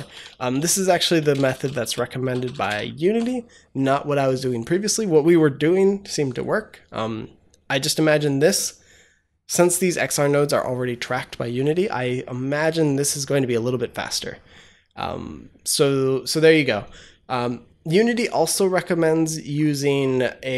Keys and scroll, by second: 1.0-2.9 typing.